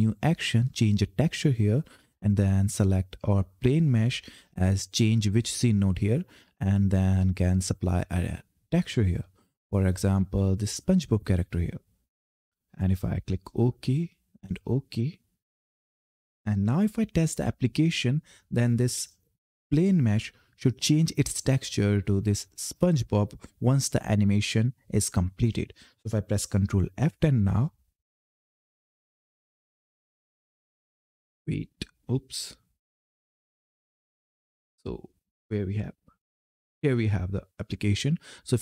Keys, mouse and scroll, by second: 2.5 click.